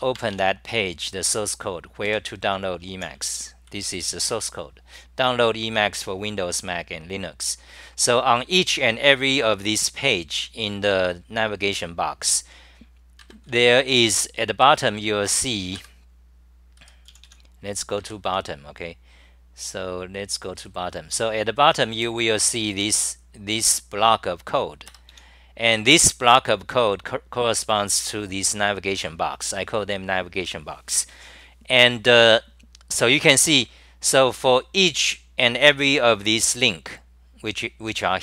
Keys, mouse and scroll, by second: 0.5 F10, 2.1 super+=, 2.2-4.2 typing, 18.3 s.